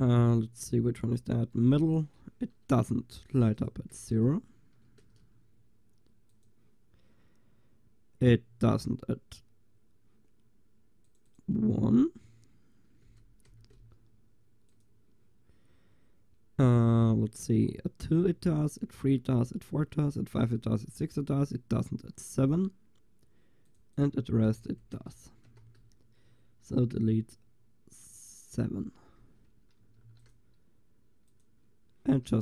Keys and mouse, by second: 3.4-6.2 drag, 4.2 BackSpace, 6.4-8.3 drag, 11.1-12.9 drag, 14.8-16.9 drag, 23.7-25.8 drag, 24.7 BackSpace, 28.2 click, 28.2 middle click, 28.4-32.4 drag, 30.0 ctrl+s.